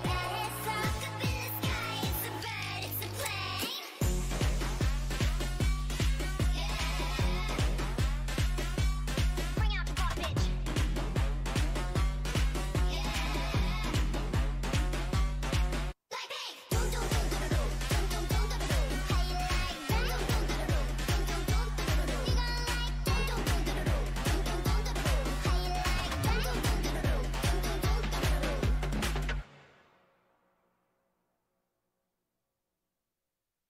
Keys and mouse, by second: 1.1-5.2 drag, 5.9 Tab, 7.7 click, 8.6 alt+m, 11.1 alt+m, 11.7 a, 15.1 ctrl+z, 15.3 ctrl+z, 15.5 ctrl+z, 15.6 ctrl+z, 16.7 s, 18.0 o, 19.5 s, 20.2 s, 22.0 g, 24.0-25.4 right drag, 24.5 s, 25.4 s, 26.8 g, 28.6 a, 29.5 z, 31.7-33.6 middle drag.